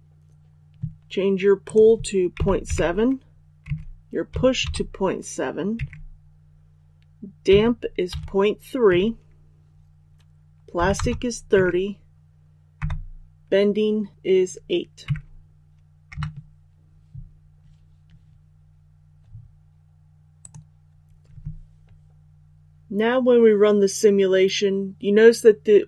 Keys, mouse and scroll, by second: 2.2 KP_Decimal, 2.5 KP_7, 3.5 Tab, 4.2 KP_Decimal, 4.5 KP_7, 5.7 Tab, 7.4 KP_Decimal, 8.0 KP_3, 8.8 Tab, 10.7 KP_3, 10.9 KP_0, 11.4 Tab, 12.7 KP_8, 15.0 Tab, 20.3-25.8 drag.